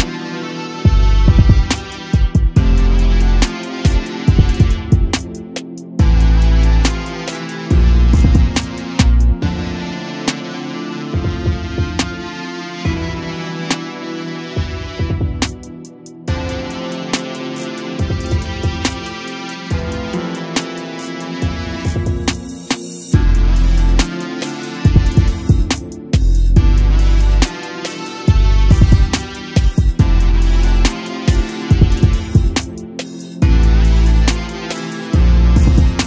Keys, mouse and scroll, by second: 0.0-0.3 scroll down 2, 0.3-0.8 middle drag, 0.8 click, 1.1-1.5 scroll down 1, 1.5 click, 2.6 click, 4.3 shift+a, 5.9 click, 6.9 ctrl+t, 7.6-8.4 middle drag, 8.4-9.5 drag, 10.2 Delete, 10.5 click, 11.1 shift+a, 16.2 click, 18.6 click, 20.6 click, 23.7 click, 29.5-30.3 drag, 34.2 click.